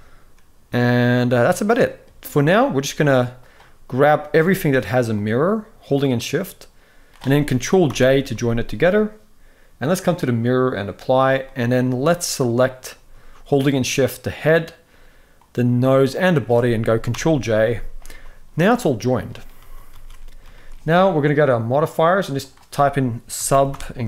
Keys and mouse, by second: 1.1-1.7 middle drag, 3.9 click, 7.6 ctrl+j, 9.7-10.4 drag, 11.2 middle click, 13.3 shift+click, 15.0 shift+click, 15.8 shift+click, 16.8 ctrl+j, 17.8 g, 18.8 middle click, 19.3 ctrl+s, 19.7 ctrl+s, 19.9 middle click, 20.2 shift+middle drag, 21.5-24.0 drag.